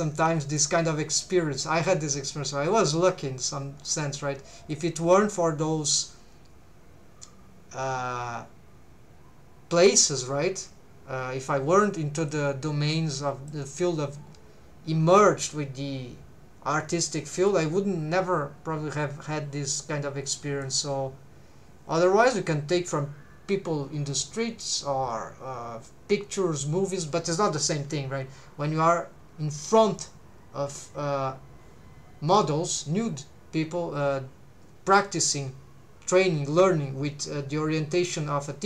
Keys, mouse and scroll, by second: 4.7-5.9 drag, 12.3-13.5 drag, 17.5-20.7 drag.